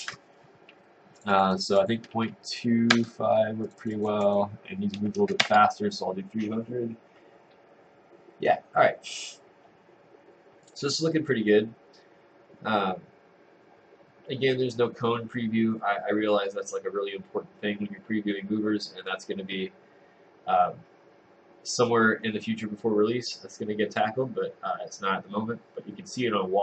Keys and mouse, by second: 3.0 Return, 5.5 Return.